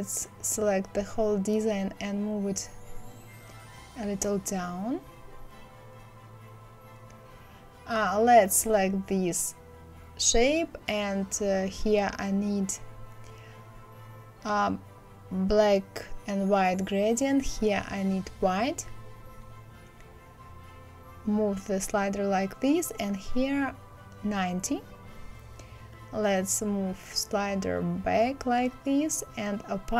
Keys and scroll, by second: 23.5 KP_9, 23.8 KP_0, 24.0 Return.